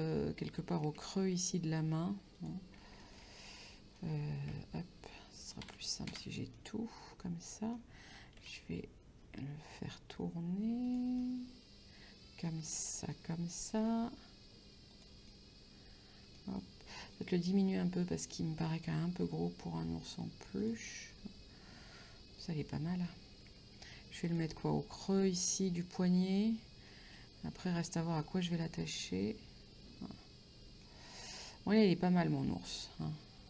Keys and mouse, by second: 1.2 g, 2.4 click, 3.0 middle click, 4.5 Tab, 5.6 a, 6.6 middle click, 8.4 r, 10.9 click, 11.2 middle click, 13.1 middle click, 13.8 r, 15.0 click, 15.3 middle click, 17.2 middle click, 19.3 s, 20.6 click, 20.9 middle click, 23.5 g, 24.3 click, 24.6 middle click, 25.8 middle click, 27.2 middle click, 31.4 Tab, 31.8 middle click.